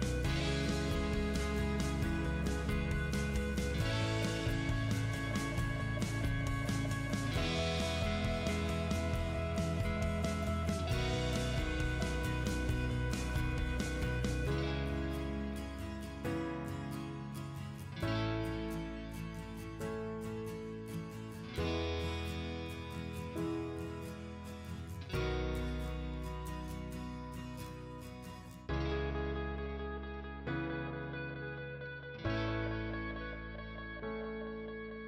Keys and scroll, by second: 17.3 Delete, 19.2 o, 19.5 space, 21.8 3, 22.2 ', 22.4 Return, 30.8 Escape, 31.8 t, 32.2 space.